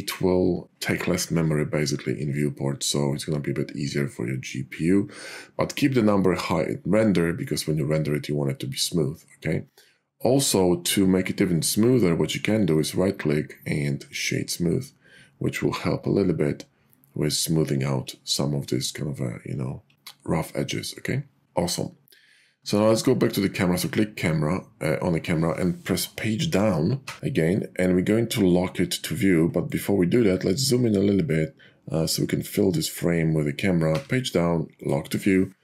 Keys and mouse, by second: 12.6-15.0 drag, 27.1 Down, 33.7 Down.